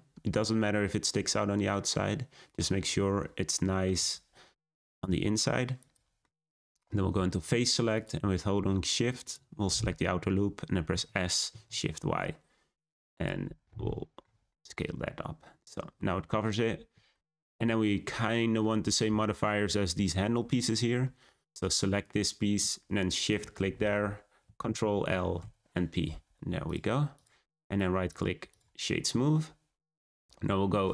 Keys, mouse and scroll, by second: 1.8-4.0 middle drag, 4.0 s, 6.2-7.9 middle drag, 7.9-9.1 drag, 9.2 click, 9.9 middle click, 10.8 s, 13.4 Tab, 13.7-14.2 scroll down 3, 14.2-20.1 middle drag, 20.3-20.9 middle drag, 20.9-23.2 scroll up 1, 23.2 shift+click, 24.6 ctrl+l, 26.6 click, 27.1 click, 27.5-28.4 right drag, 28.4 click, 28.9 scroll down 1, 29.5 scroll down 1, 29.7 `.